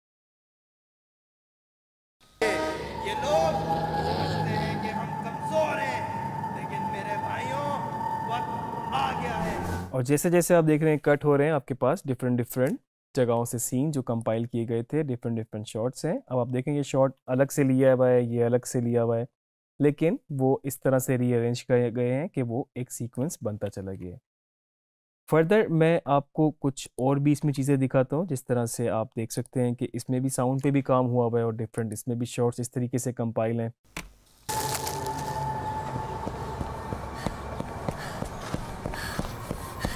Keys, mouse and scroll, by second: 2.1 space, 10.2 space, 14.3-23.9 drag, 26.9 click, 29.5 click, 31.8 click, 34.1 space.